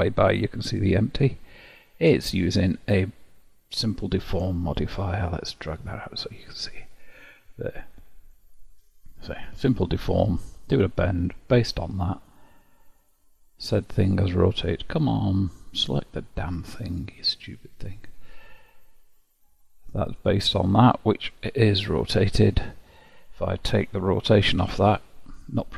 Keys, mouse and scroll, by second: 5.6-8.3 drag, 10.9-12.2 middle drag, 12.2-17.5 drag, 17.7-18.7 drag, 18.7-21.3 middle drag, 21.3-22.8 drag, 22.8-24.5 middle drag, 24.5 alt+r.